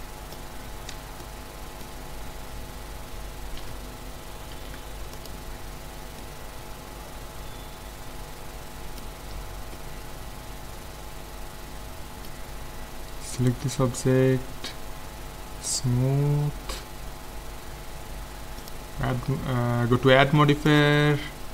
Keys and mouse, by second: 0.6 middle click, 0.9 z, 1.2-4.1 middle drag, 3.6 KP_5, 4.6 ctrl+s, 9.3 a, 9.8-11.6 middle drag, 12.9 click, 13.4-15.1 right drag, 15.7-17.4 drag, 18.6-20.4 drag, 20.7 click.